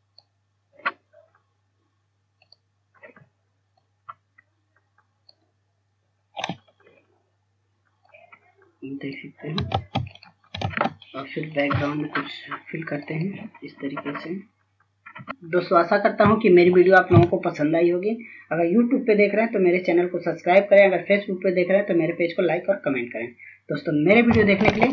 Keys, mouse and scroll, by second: 11.7 ctrl+space, 12.1 click, 13.0 scroll down 1, 13.5-15.9 drag.